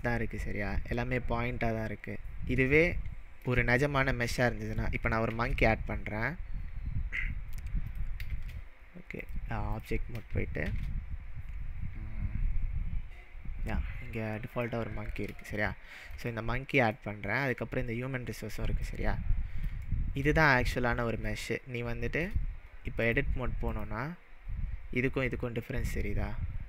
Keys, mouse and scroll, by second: 2.2-2.6 scroll down 3, 2.8-3.6 shift+middle drag, 3.9-4.3 scroll down 4, 4.4-5.0 shift+middle click, 5.3 shift+a, 7.9 click, 9.2-10.7 drag, 10.6 shift+a, 14.4 click, 15.5-16.8 shift+middle drag, 18.8-19.7 click, 19.9-20.4 shift+middle drag, 23.1-25.2 drag, 25.2-25.7 scroll up 2, 25.7 scroll down 1.